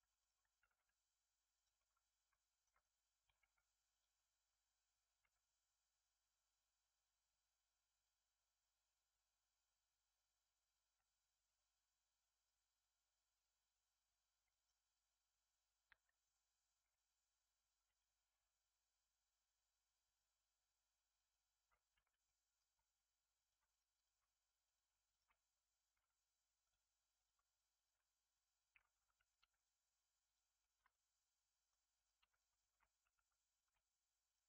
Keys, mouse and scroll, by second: 0.1 click, 0.5 g, 1.7-3.3 middle drag, 3.3 k, 17.7 k, 22.2 middle click, 22.7-23.3 scroll up 3, 23.3 click, 23.6 shift+click, 23.9 shift+click, 24.6 click, 25.0 shift+click, 25.9 m, 27.1 click, 27.7 shift+click, 28.9 2, 29.1 click, 29.3 x, 30.5-31.9 shift+middle drag, 31.9 click, 32.1 x, 32.5 shift+middle click, 33.0 1, 33.5 click, 34.2 shift+click.